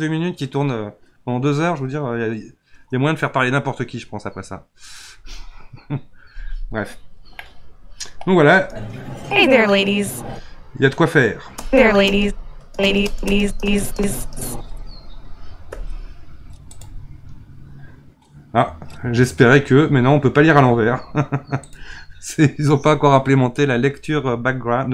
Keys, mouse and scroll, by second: 7.4-8.5 middle drag, 8.5 space, 10.2 space, 11.5-14.5 typing, 16.7-19.8 drag, 21.7-24.8 drag.